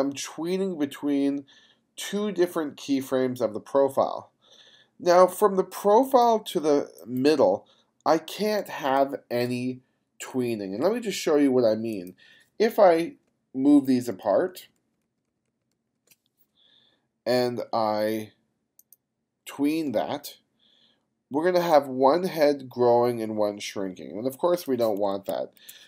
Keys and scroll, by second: 8.8 space, 9.4 space, 13.9 shift+=, 25.3 super+z.